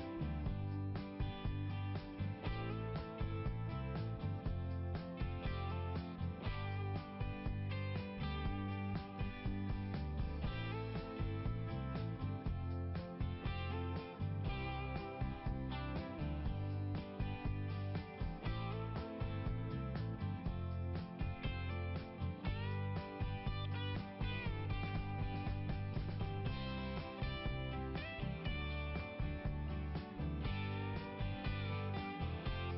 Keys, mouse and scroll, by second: 1.7 click, 5.3 scroll up 1, 7.2 click, 7.3 click, 8.1 click, 8.3 click, 11.4 scroll down 1, 12.6 click, 19.6 click, 19.8 click, 19.9 click, 20.0 click, 21.5 [, 22.2 click, 28.1 click, 29.9 scroll up 1.